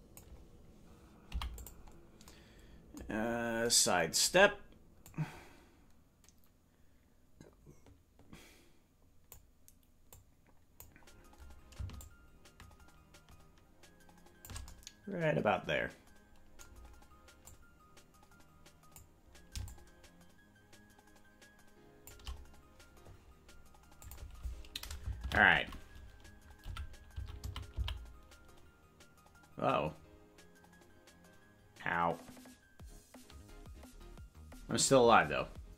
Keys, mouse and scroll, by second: 2.2 i, 3.2-3.6 scroll up 5, 5.1-9.4 drag, 10.2 click, 12.0-14.7 shift+drag, 17.4-19.0 drag, 19.6-22.2 shift+drag.